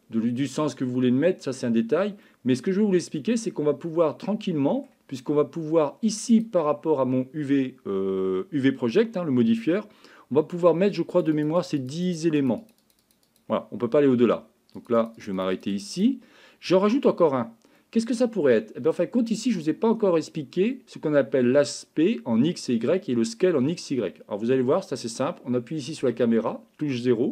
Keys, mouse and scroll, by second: 2.3-4.9 middle drag, 6.3 click, 11.4 click, 11.6 click, 11.8 click, 12.0 click, 12.4 click, 12.6 click, 12.8 click, 13.0 click, 13.4 click, 15.0 click, 15.2 click, 15.4 click, 15.5 click, 15.7 click, 15.9 click, 17.8-19.0 middle drag, 26.0 KP_0.